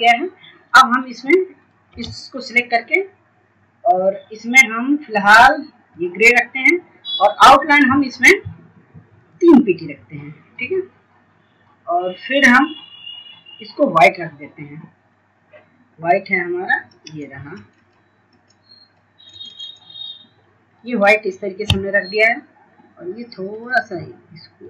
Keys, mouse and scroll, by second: 0.9 ctrl+space, 1.2 click, 4.2 shift+click, 22.4 right click, 23.6 click.